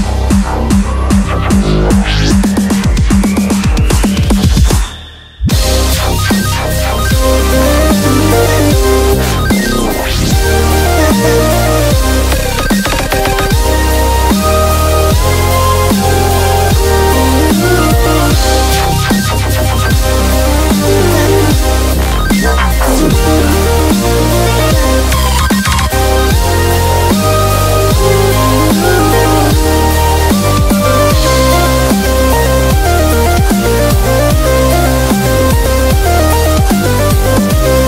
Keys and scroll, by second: 1.8 super+-, 2.0 super+-, 2.1 super+-, 6.6-7.8 typing, 11.7 b, 12.1 super+-, 21.0-21.7 typing, 25.3 super+z.